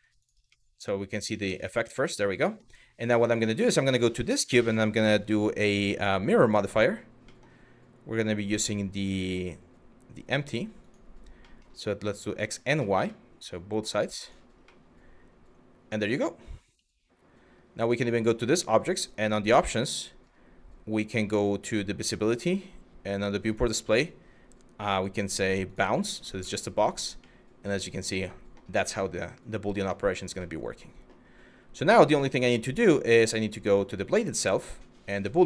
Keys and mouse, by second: 0.1-1.1 middle drag, 1.6 middle click, 2.1 middle click, 2.9 click, 3.8-6.0 drag, 7.0 middle click, 7.9 click, 11.0 middle drag, 12.0 click, 12.8-13.5 middle drag, 13.8 click, 14.4-15.6 middle drag, 17.6 click, 18.6 click, 23.1-25.4 drag, 26.1-26.5 middle drag, 26.9-28.2 drag, 26.9-28.2 right drag, 28.7-29.4 drag, 28.7-29.4 right drag, 30.1 click, 30.1 right click, 31.9 click, 34.6 click.